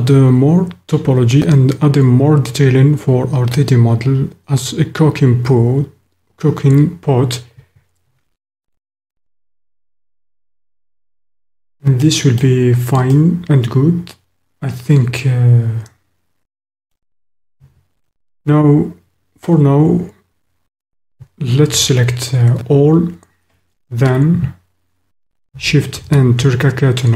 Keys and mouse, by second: 12.0 click, 13.4 middle click, 14.7 middle click, 14.9-16.2 drag, 16.2 middle click, 16.3 click, 21.7 a, 26.1 shift+n.